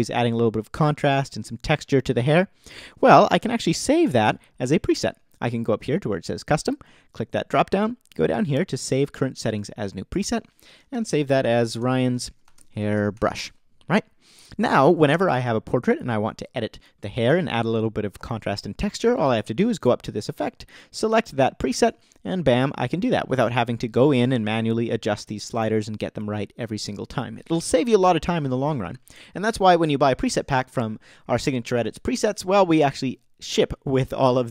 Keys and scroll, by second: 10.7-14.2 typing.